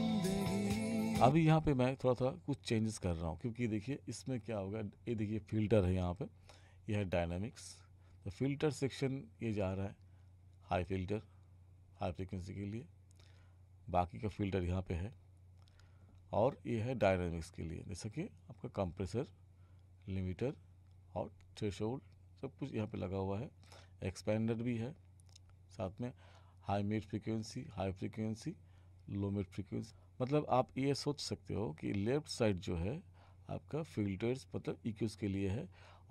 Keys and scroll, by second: 1.3 space.